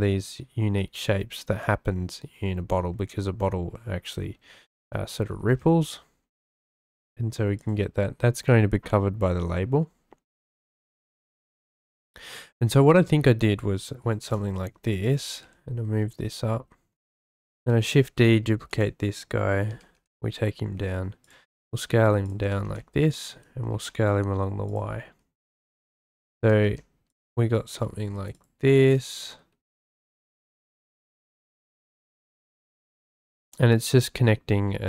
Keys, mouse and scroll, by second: 1.3 click, 5.3 s, 5.4 x, 7.6 click, 14.0 s, 14.2 y, 15.0 click, 15.2 g, 15.5 y, 17.7 shift+d, 18.7 click, 19.7 g, 19.9 y, 21.2 click, 21.6-23.7 typing, 23.1 click, 25.0 s, 26.0 click, 26.4-28.7 typing, 27.1 click, 30.1 g, 30.2 z, 31.0 click, 31.2 g, 31.5 y, 32.9 shift+middle click, 33.5 shift+middle click.